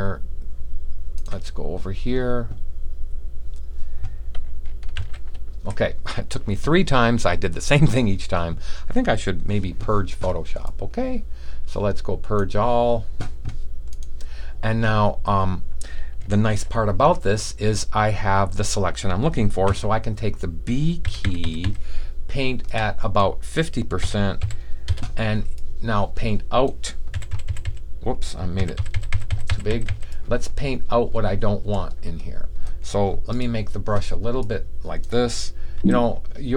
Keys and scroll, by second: 4.9 super+v, 16.4 super+d, 19.6 typing, 20.9-21.5 typing, 24.1-24.8 typing, 27.0-29.8 typing, 31.7-32.4 typing, 35.7 [.